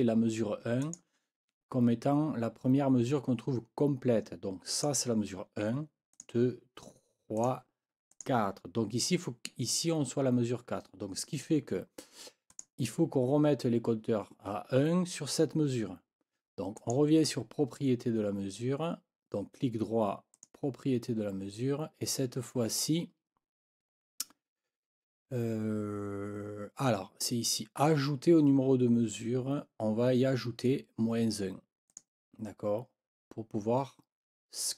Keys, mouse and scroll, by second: 0.8 click, 4.7 click, 6.1 click, 7.4 click, 8.1 click, 12.5 click, 16.8 right click, 20.3 click, 31.9 click.